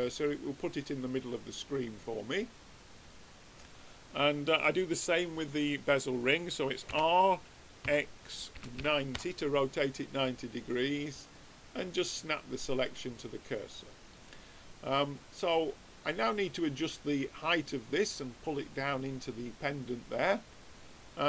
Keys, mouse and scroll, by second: 3.6-4.7 drag, 6.8 r, 9.8 middle click, 11.3-13.0 drag, 14.1 middle click, 16.1-17.8 drag, 19.1-21.2 middle drag.